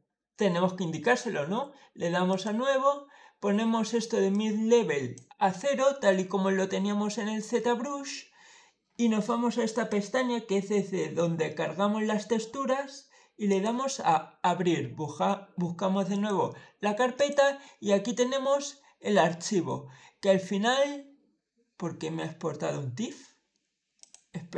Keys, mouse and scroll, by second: 2.1 click, 4.1-5.0 drag, 9.6 click, 13.3 click, 16.0 click, 17.0 click, 23.8 click.